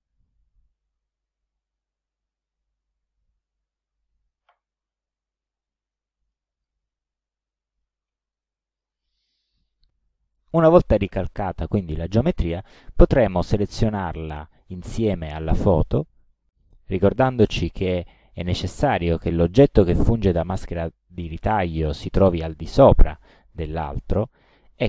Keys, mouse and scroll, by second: 1.2 alt+Down, 2.5 alt+Right, 3.7 alt+Right, 4.4 ctrl+alt+Right, 4.8 ctrl+alt+scroll down 2, 6.4 ctrl+click, 7.5 ctrl+click, 8.1 ctrl+middle click, 8.1-8.7 ctrl+scroll, 8.7 scroll, 8.8 click, 10.3 click, 13.5 click, 15.6 shift+click.